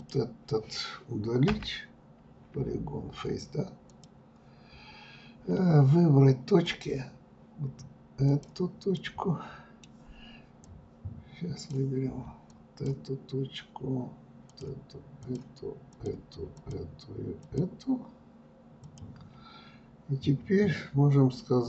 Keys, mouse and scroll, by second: 3.8 scroll up 2, 5.5 click, 7.1 click, 7.8-9.5 middle drag, 9.5-14.2 drag, 14.8 shift+click, 15.4 shift+click, 16.3 shift+click, 17.7 shift+click.